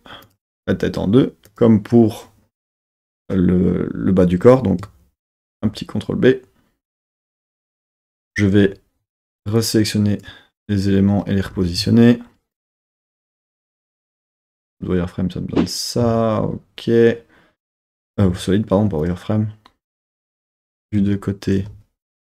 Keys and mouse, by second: 1.5 click, 3.1 click, 5.4 super+b, 7.4 click, 9.6 click, 11.5 g, 11.8 z, 12.5 click, 13.2 g, 13.4 z, 14.3 click, 14.4 z, 16.0 z, 21.0 KP_3, 21.6 z.